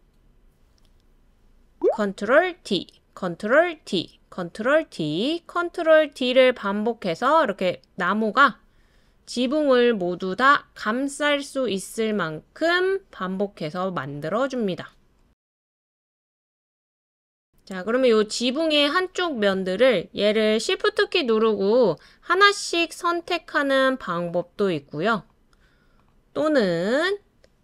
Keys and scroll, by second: 2.6 super+d, 3.8 super+d, 4.7 super+d.